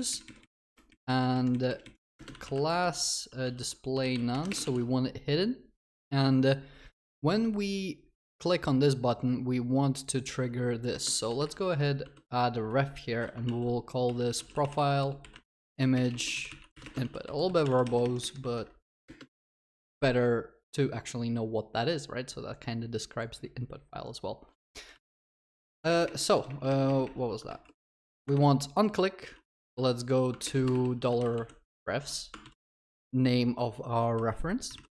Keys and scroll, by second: 2.8 Return, 4.6 ctrl+s, 13.5 ctrl+s, 17.2 ctrl+w, 17.5 ctrl+c, 17.6 ctrl+s, 25.5 Return, 28.0 ctrl+BackSpace.